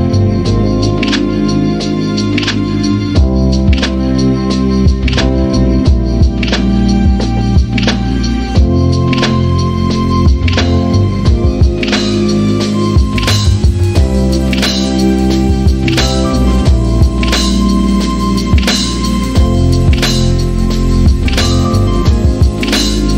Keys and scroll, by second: 16.4 p, 16.5 Return, 17.7-18.0 typing, 21.5-22.7 typing.